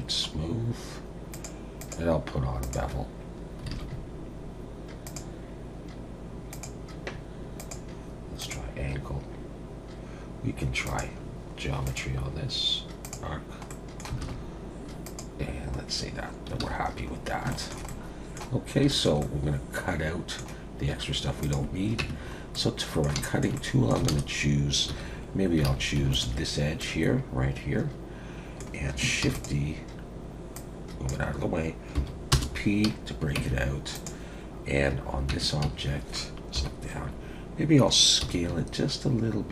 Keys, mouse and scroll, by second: 0.3 scroll up 1, 1.3 click, 1.8 click, 3.7 alt+a, 3.9-4.8 scroll up 2, 4.8 scroll up 1, 5.0 click, 6.5 click, 7.6 click, 10.8 click, 11.2-11.8 scroll down 3, 11.8 click, 11.8-13.2 scroll down 1, 13.7 middle click, 14.2 alt+a, 14.4-15.0 scroll up 1, 15.0 scroll up 2, 15.0 click, 15.9 scroll down 2, 16.6 alt+a, 16.8-17.4 scroll down 1, 17.4 scroll down 3, 17.5 shift+middle click, 17.9 middle click, 18.5-18.9 scroll down 2, 18.9 shift+middle click, 19.2 middle click, 21.4 click, 22.1 Tab, 22.2 scroll up 3, 22.5 middle click, 23.2 shift+middle click, 23.5 middle click, 24.9 2, 25.7 alt+a, 26.1 alt+shift+click, 26.8 middle click, 29.2 shift+d, 30.5 click, 31.9 p, 33.4 Tab, 33.9 click, 35.3 Tab, 35.6 a, 36.6 KP_7, 38.2 s.